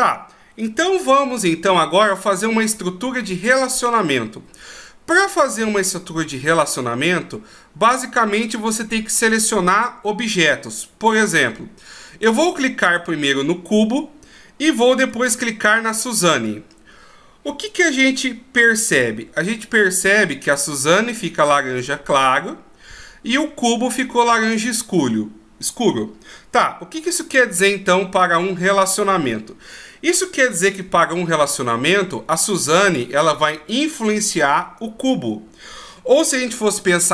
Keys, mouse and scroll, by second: 16.3 shift+right click.